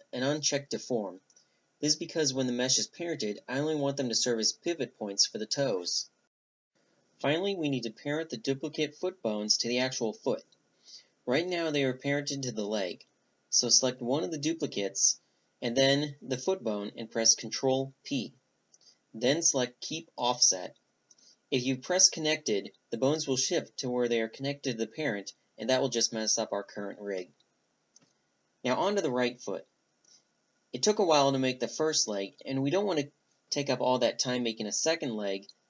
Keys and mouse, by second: 1.5-2.2 middle drag, 2.2 right click, 2.5-4.9 middle drag, 5.5 click, 6.5-7.5 right drag, 7.5 click, 7.9 a, 8.3 Tab, 10.6-11.3 middle drag, 11.3 Tab, 11.7 click, 13.4 ctrl+p, 16.2 right click, 18.1 right click, 18.6 ctrl+p, 19.3 click, 19.9 ctrl+p, 20.4 middle click, 20.7-22.0 middle drag, 21.1 a, 21.5 Tab, 24.9-35.6 middle drag.